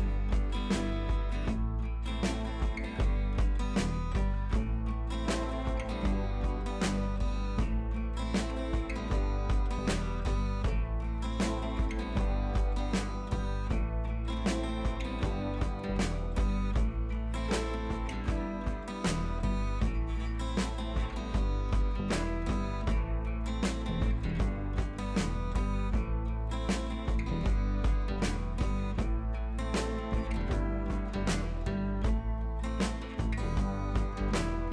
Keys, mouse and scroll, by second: 7.1-8.2 click, 20.0 click, 20.5-21.0 scroll up 1, 21.2-21.8 scroll up 1, 21.8 click, 22.3 ctrl+j, 23.1-23.6 click, 23.9-24.2 scroll down 1, 24.7 click, 27.6 click, 29.1-34.2 drag, 34.3-34.7 scroll up 1.